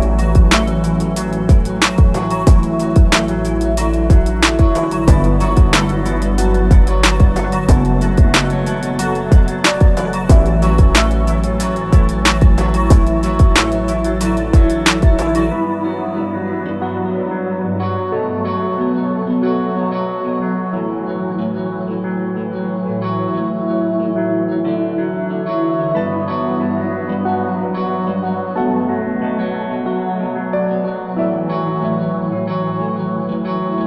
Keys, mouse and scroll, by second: 15.8 alt+click, 20.6 click, 22.2 click, 24.1 click, 26.0 shift+click, 26.8 click, 28.2 click.